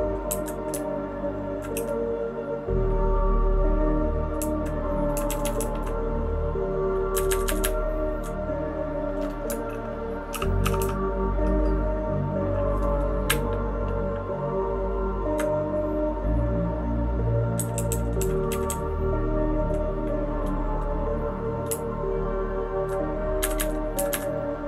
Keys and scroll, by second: 0.3 Up, 0.7 Down, 1.2-1.5 Down, 1.7 Down, 4.4 Down, 5.3 Down, 5.4 Down, 5.6 Down, 5.7 Down, 7.1 Up, 7.2 Up, 7.4 Up, 7.6 Up, 8.1 Up, 8.2 Up, 10.3 shift+], 10.6 shift+], 10.8 shift+], 13.2 Up, 13.7-15.3 Up, 17.6 Down, 17.7 Down, 17.9 Down, 18.2 Down, 18.5 Down, 18.7 Down, 18.8-19.6 Down, 21.6 Up, 22.2-22.8 Up, 23.4 Up, 23.5 Up, 23.9 Up, 24.1 Up.